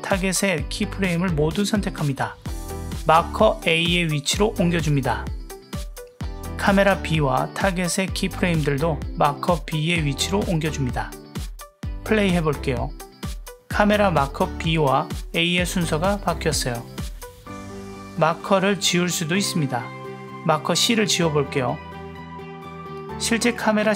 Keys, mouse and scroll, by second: 0.1-0.6 drag, 1.3 click, 1.6 click, 2.2-2.7 drag, 3.6 l, 4.3 g, 6.6 drag, 7.7 click, 7.9 click, 9.3 l, 9.9 g, 11.8 drag, 12.1-14.1 middle drag, 12.1 space, 16.6 space, 18.2 click.